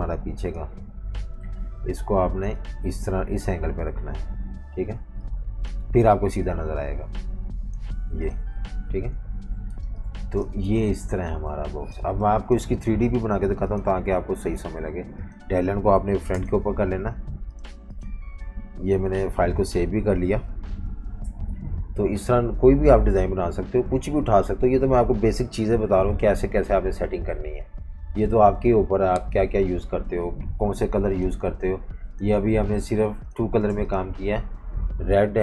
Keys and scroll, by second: 0.6 super+3, 1.2 alt+super+3, 4.9-6.3 typing, 8.7 super+-, 8.9 super+-, 9.8-10.8 typing, 12.0 v, 16.3 shift+super+], 19.4 super+s, 21.2 F18.